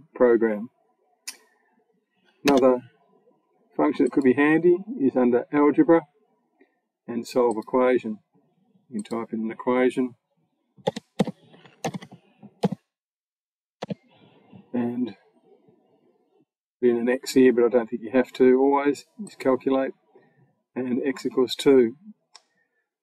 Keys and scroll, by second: 2.3 BackSpace, 10.7-13.6 typing.